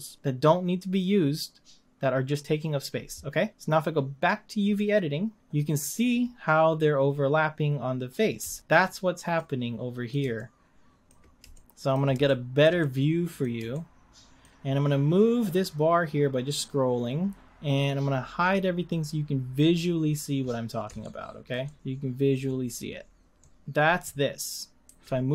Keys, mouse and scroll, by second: 4.6 click, 8.6 z, 9.5-19.8 middle drag, 19.8 scroll up 1, 21.0 ctrl+middle click, 21.5 ctrl+scroll down 1, 21.6-23.4 ctrl+middle drag, 23.4 click, 24.9 g.